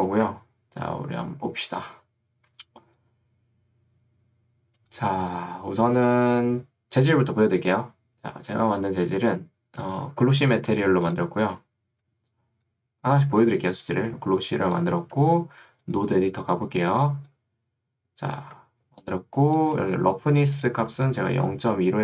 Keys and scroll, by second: 13.5 ctrl+2, 15.3 Escape, 18.9 ctrl+2, 19.9 Escape, 21.1 ctrl+2.